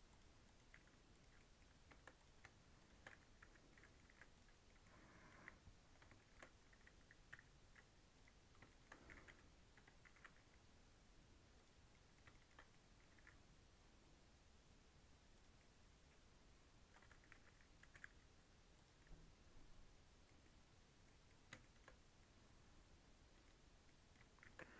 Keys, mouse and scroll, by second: 0.4 click, 0.7 g, 1.3 middle click, 2.1 click, 2.8 shift+click, 3.4 j, 3.7 middle click, 4.1 3, 4.3 click, 4.5 scroll down 1, 4.6 middle click, 5.3 KP_1, 5.7-6.1 scroll up 3, 6.1 shift+middle click, 6.3 shift+scroll down 2, 7.3 i, 8.6 shift+middle click, 9.1 s, 10.0 s, 11.8 scroll down 1, 11.9 middle click, 12.5 scroll up 2, 12.7 middle click, 13.1 e, 15.5-17.1 middle drag, 17.1 g, 17.9 g, 18.9-20.3 middle drag, 20.3 scroll down 1, 20.4 middle click, 21.1 scroll up 2, 21.2 middle click, 22.0 scroll up 1, 22.2-23.6 middle drag, 23.6 scroll down 1, 23.8 middle click, 24.4 shift+d.